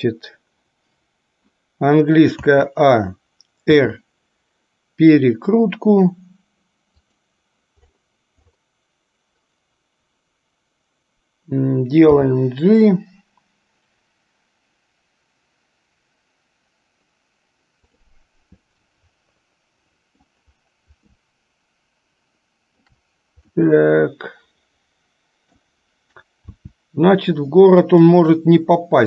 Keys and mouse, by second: 2.6 a, 3.9 r, 12.3 g, 18.9-20.5 middle drag, 21.4-23.1 shift+middle drag, 23.7-25.7 middle drag, 26.5 r.